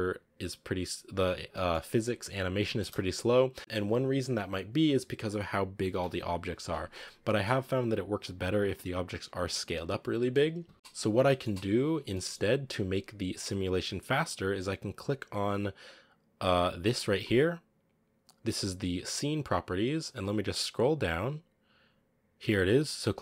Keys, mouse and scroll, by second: 1.4 middle click, 1.7-2.4 scroll up 3, 2.7 space, 3.6-6.5 drag, 6.5 a, 7.1-8.7 middle drag, 8.7-9.9 scroll up 1, 9.9-10.4 scroll down 1, 10.4 a, 10.7 s, 10.7 middle drag, 11.0 scroll up 1, 11.1-23.2 middle drag.